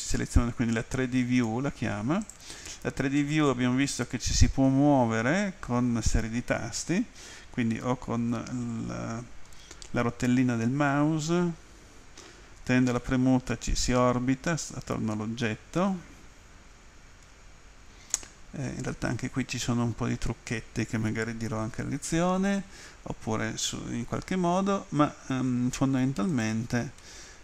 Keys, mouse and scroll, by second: 2.3 click, 3.2 middle click, 3.9 middle click, 5.0 middle click, 7.7 scroll up 2, 8.4-8.8 scroll down 2, 10.4 scroll up 1, 10.7-11.6 scroll down 1, 13.0 middle click, 15.3 middle click, 16.1 middle click, 17.1 middle click, 17.3 middle click, 18.1 middle click, 18.9 middle click, 26.3 right click, 27.0 middle click.